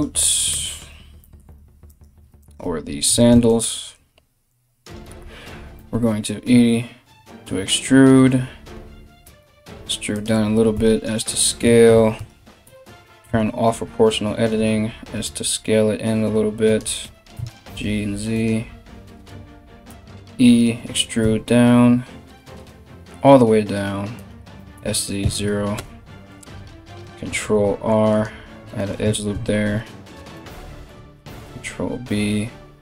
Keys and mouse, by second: 0.1 Tab, 1.5 right click, 2.0 right click, 2.6 2, 3.0 alt+right click, 5.3 e, 9.9-32.8 middle drag, 10.3 s, 12.2 o, 12.8 s, 16.6 g, 19.5 e, 24.1 s, 26.9 ctrl+r, 28.5 right click, 28.9 ctrl+b, 30.4 right click.